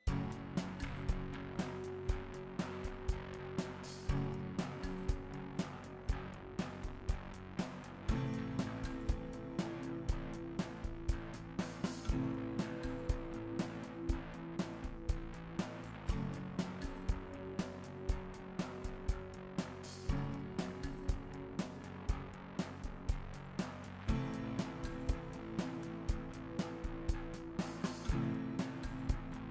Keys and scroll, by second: 7.1 n, 11.1 KP_Divide, 13.5 s, 18.6 Tab, 22.4 KP_Divide, 23.1 Tab.